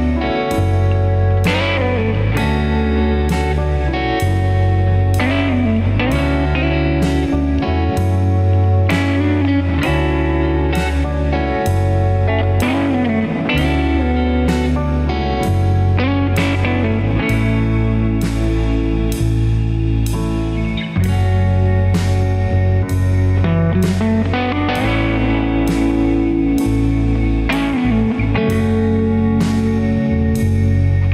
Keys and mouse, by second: 8.4 alt+z, 9.8 g, 12.4 g, 18.9 ctrl+z, 22.8 ctrl+shift+z, 24.3 g.